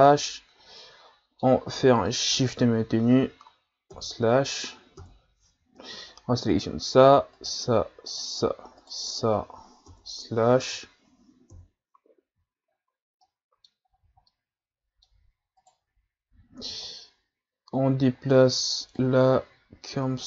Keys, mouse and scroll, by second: 0.8-2.4 middle drag, 2.4 shift+right click, 3.9 KP_Divide, 5.0 KP_Divide, 6.5 right click, 7.3 shift+right click, 8.1 shift+right click, 8.8 shift+right click, 9.9 KP_Divide, 11.5 KP_1, 12.7 scroll down 3, 13.2-13.9 middle drag, 13.9-14.2 scroll up 4, 14.3-15.6 middle drag, 15.6 right click, 16.8-20.2 drag.